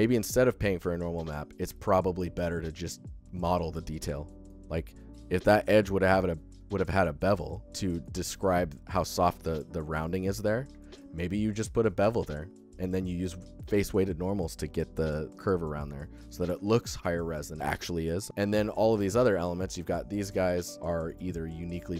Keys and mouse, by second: 0.1 alt+shift+drag, 0.3 ctrl+alt+drag, 0.5 alt+click, 1.6 alt+shift+drag, 4.0 shift+click, 4.0-4.3 alt+shift+middle drag, 7.3 alt+shift+middle click, 7.8 alt+shift+click, 10.6 alt+shift+click, 15.7 alt+shift+click, 16.3 alt+shift+click, 16.5 ctrl+alt+click, 16.7 click, 16.8 alt+click, 16.9 alt+shift+drag, 17.3 ctrl+click, 19.4 alt+shift+middle click, 19.6 alt+middle click, 19.9 alt+shift+middle click, 20.7 alt+shift+middle click, 21.0 alt+middle click, 21.3 alt+shift+middle click.